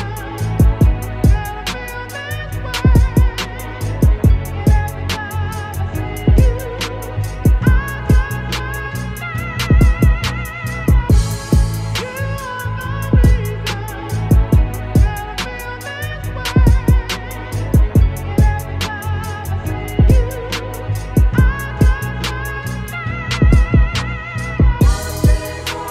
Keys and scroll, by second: 6.4 ctrl+-, 7.1 ctrl+s, 10.4 ctrl+alt+t, 14.4 Up, 14.7 Return, 16.8 ctrl+shift+t, 16.9 ctrl+shift+Up, 17.3 Return, 17.8 b, 18.4 shift+x, 19.0 ctrl+z, 19.5-21.2 typing, 20.9 ctrl+z, 22.8 ctrl+BackSpace, 24.8 Return, 25.8 x.